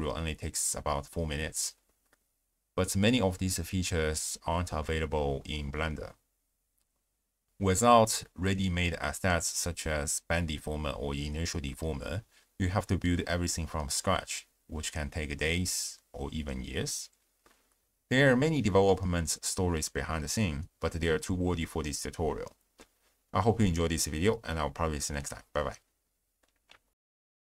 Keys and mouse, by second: 0.7 click, 2.9 click, 3.6 click, 10.9 click, 11.6 click, 12.4 click, 13.2 click, 14.2 click, 25.1 click.